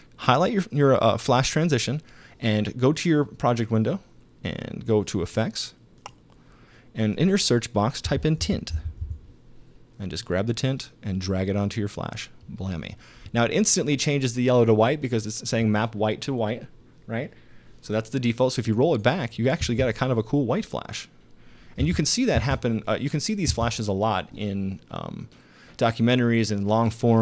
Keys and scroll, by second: 7.8-9.5 typing, 19.6 space, 21.8 space.